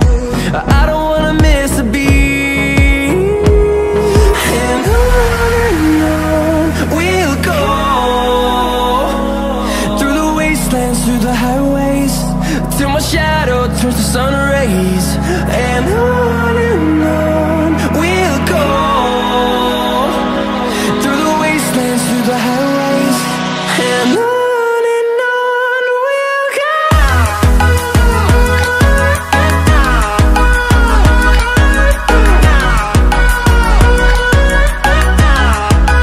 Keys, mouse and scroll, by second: 1.0-2.5 scroll up 8, 2.5-7.6 drag, 7.8-8.4 scroll down 2, 8.4-11.2 middle drag, 11.2-12.0 scroll down 6, 12.0-14.0 middle drag, 14.0 KP_7, 15.1-18.5 scroll down 2, 20.4-21.4 scroll up 3, 21.4-22.4 shift+middle drag, 22.4-23.0 scroll up 5.